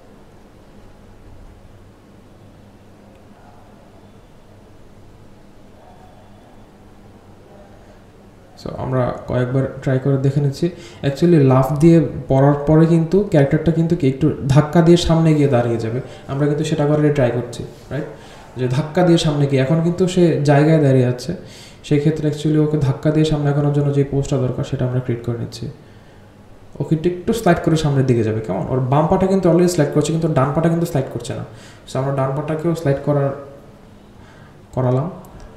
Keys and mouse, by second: 13.0-13.8 drag, 14.8 click, 15.8-17.9 drag, 18.5 click, 22.6-25.7 drag, 26.5 click, 27.2 g, 30.0-35.5 drag.